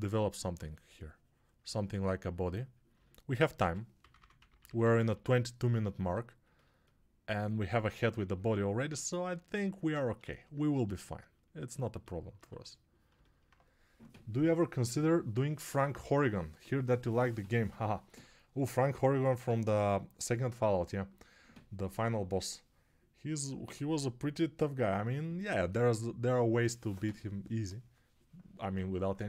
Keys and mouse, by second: 9.7 ctrl+space, 12.4 2.